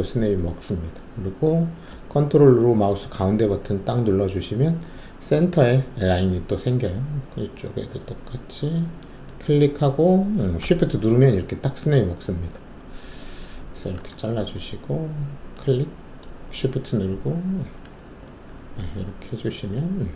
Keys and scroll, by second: 18.5 shift+w.